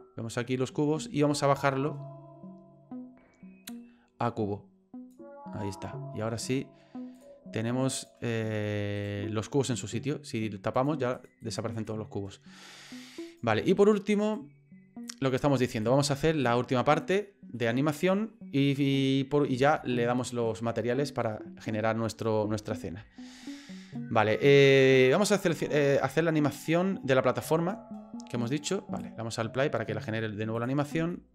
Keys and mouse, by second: 3.7-5.1 drag, 7.2 click, 9.0 right click, 10.7 click, 11.1 click, 11.4 click, 11.7 click, 13.3 right click, 14.2 right click, 15.2 middle click, 15.8 click, 17.7 middle click, 19.7 shift+middle click, 21.5 middle click, 27.7-29.0 drag, 30.6 click, 31.1 shift+middle click.